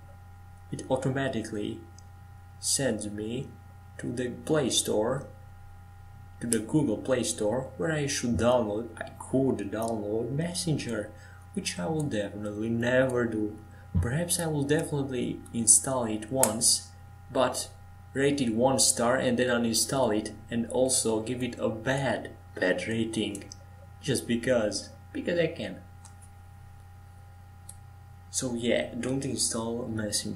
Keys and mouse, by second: 5.0-7.7 drag, 5.0-7.7 right drag, 21.6-26.5 right drag, 22.3-24.8 drag, 28.8 ctrl+s.